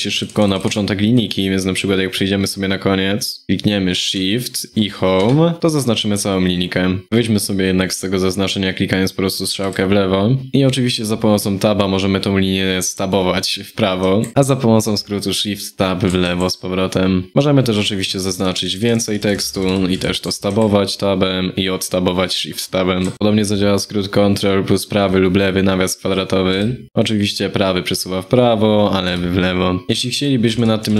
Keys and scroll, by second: 0.0 ctrl+Right, 0.1 ctrl+Right, 26.2 ctrl+], 28.7 ctrl+[.